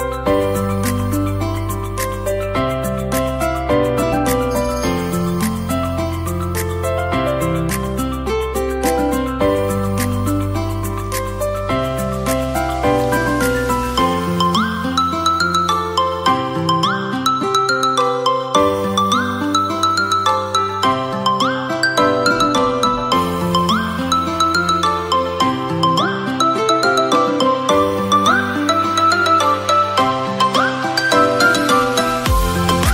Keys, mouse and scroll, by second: 0.1 g, 0.4 x, 1.2 click, 1.8 r, 2.3 z, 3.5 click, 4.3 click, 16.5-17.1 scroll up 2, 17.1-18.5 middle drag, 18.7-19.5 scroll up 1, 19.5 scroll up 1, 19.7 KP_7, 24.2 g, 24.6 y, 28.1 click, 29.6 shift+d, 29.8 x, 31.7 click, 32.0-32.4 middle drag, 32.6 shift+a.